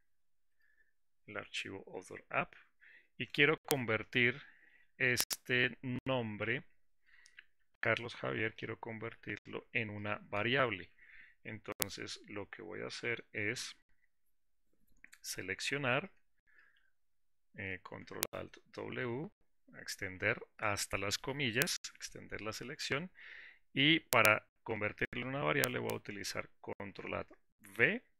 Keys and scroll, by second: 16.8 ctrl+alt+w.